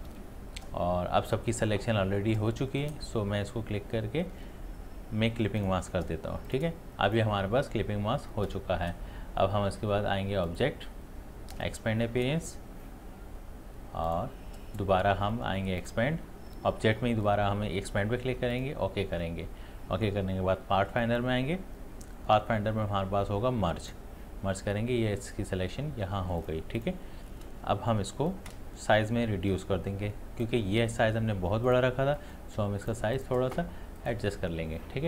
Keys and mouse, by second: 2.8 right click, 5.6 click, 10.5 click, 14.1 click, 18.5 click, 21.0 click, 23.8 click, 26.4-33.2 drag.